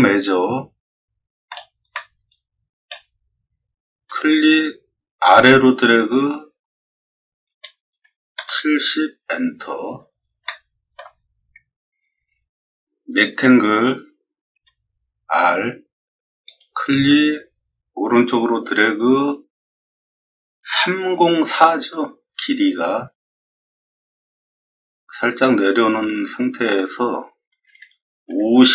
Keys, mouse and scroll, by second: 1.4 middle click, 1.9 middle click, 4.0 click, 7.4 7, 7.9 0, 8.3 Return, 9.7 scroll down 2, 10.4 shift+middle click, 11.5 middle click, 11.9 middle click, 14.5 r, 16.4 click, 27.6 5, 28.2 0.